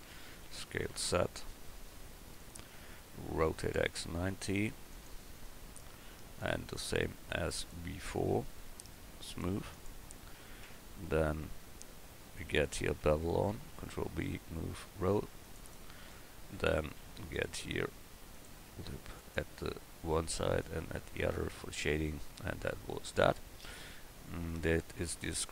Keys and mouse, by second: 0.4 s, 3.5 r, 5.7 middle click, 10.6 Tab, 13.5 ctrl+b, 17.0 ctrl+r, 18.9 ctrl+r, 21.2 Tab, 24.5 click, 24.7 click.